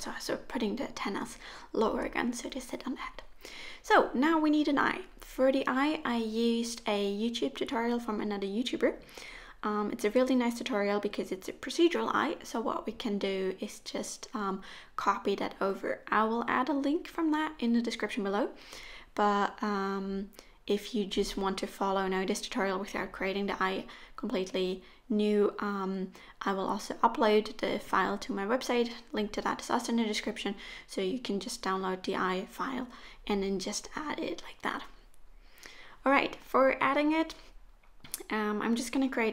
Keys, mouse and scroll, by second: 0.0 click, 0.1 middle click, 1.3-2.3 scroll down 2, 1.4 click, 11.6 click, 12.5 click, 13.8 ctrl+click, 15.9 ctrl+c, 22.3 ctrl+v, 27.8-29.4 scroll down 2, 29.4 right click, 32.9-33.7 scroll down 2, 33.7 click, 33.7 scroll down 1, 33.9 click, 37.2 click, 39.0 click.